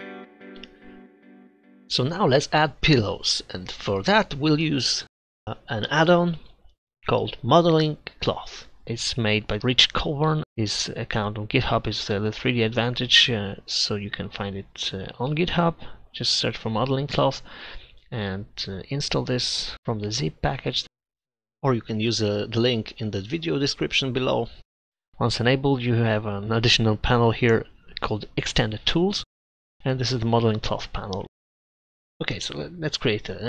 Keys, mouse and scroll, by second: 5.8-6.8 drag, 26.4-28.0 drag, 31.2 Delete.